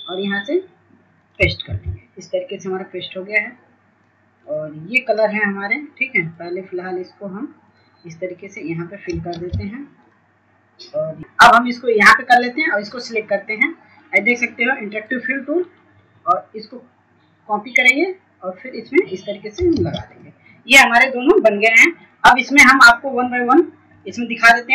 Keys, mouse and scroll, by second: 20.9 ctrl+space, 21.3-24.7 drag.